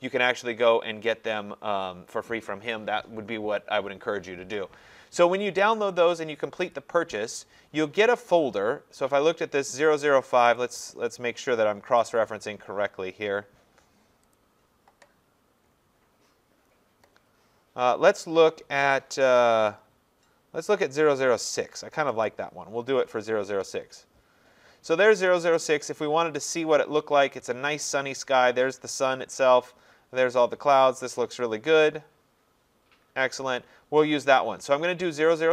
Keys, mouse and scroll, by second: 6.7 click, 10.6 click, 12.1 click, 14.3 click, 15.6-15.9 scroll, 22.3 click, 25.7 click.